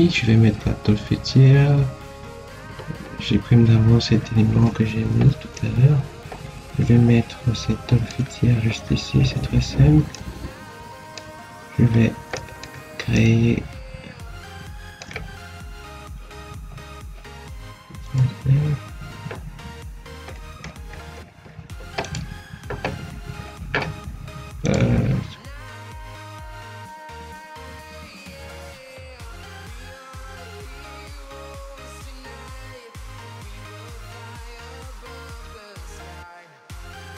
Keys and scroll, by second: 2.3 ctrl+x, 30.2 Escape, 36.5 Escape.